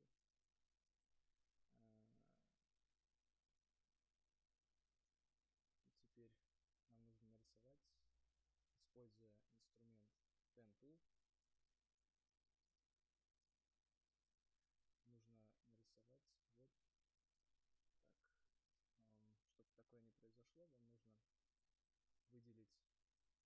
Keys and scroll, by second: 18.5 ctrl+z.